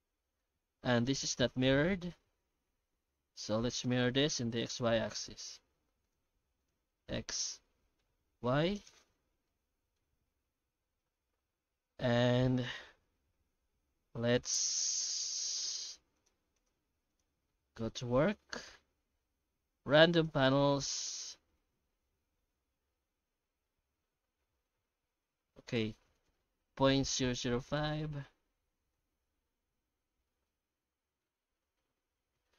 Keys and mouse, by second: 0.0 ctrl+z, 0.4 Tab, 1.1-3.8 middle drag, 4.1 Tab, 4.6 shift+q, 7.5-9.1 middle drag, 9.1 Tab, 9.5 middle click, 11.1 Tab, 11.5 Tab, 14.0 ctrl+r, 15.1 alt+a, 15.7 3, 15.8 right click, 16.1 shift+right click, 16.5 shift+right click, 16.8 q, 17.6 Tab, 18.1 shift+q, 27.2 KP_0.